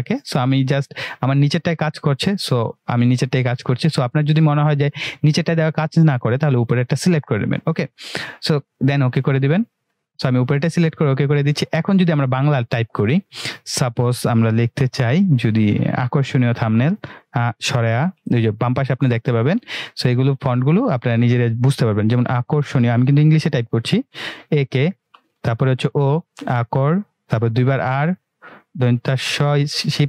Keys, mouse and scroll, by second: 8.8-9.4 drag, 11.9 click, 29.3 shift+Num_Lock.